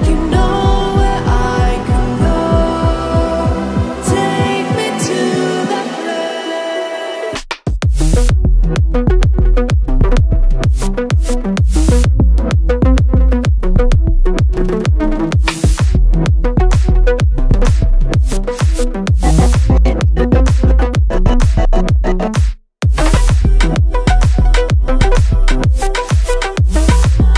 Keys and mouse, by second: 0.2 shift+middle click, 0.4 ctrl+middle click, 1.0 shift+middle click, 2.0 middle click, 2.4 click, 3.3 click, 4.2 click, 8.0 click, 8.1-9.1 drag, 9.5 middle click, 10.1 ctrl+middle click, 11.9 ctrl+middle click, 12.6 middle click, 12.8 ctrl+middle click, 13.3-15.4 drag, 20.8-22.0 drag, 23.6 ctrl+middle click, 26.3-26.9 drag, 27.1-27.3 drag.